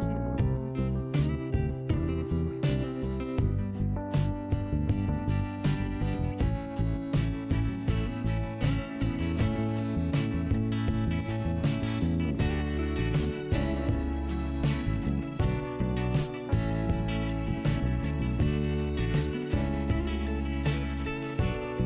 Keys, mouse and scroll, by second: 0.2 click, 3.1 click, 11.3 click, 12.7 click, 15.5 click, 16.6 click, 19.0-19.6 scroll up 2, 20.0 click, 20.9 click.